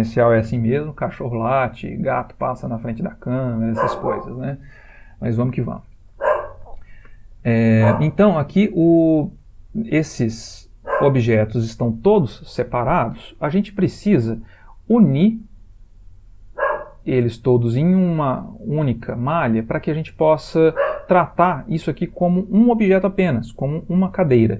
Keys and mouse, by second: 9.0 g, 10.5 click, 11.0 g, 18.8 ctrl+middle click.